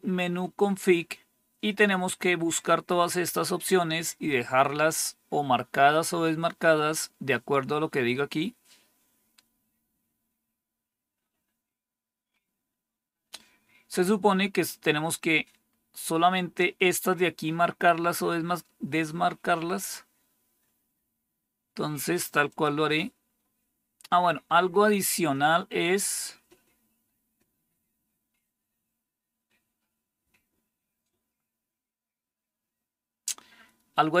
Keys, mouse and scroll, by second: 0.7-1.7 scroll down 2, 1.7-2.2 scroll down 1, 2.2-7.7 scroll down 1, 7.7-8.7 scroll down 1, 8.7-9.7 scroll down 1, 9.7-11.3 scroll down 1, 11.3-12.2 scroll down 1, 12.2-14.2 scroll down 2, 14.2-15.6 scroll down 1, 15.6-16.2 scroll down 1, 16.2-17.0 scroll down 1, 17.0-18.3 scroll down 1, 18.3-19.8 scroll down 1, 19.8-20.3 scroll down 1, 20.3-22.4 scroll down 1, 22.4 click, 33.3-34.2 scroll down 4.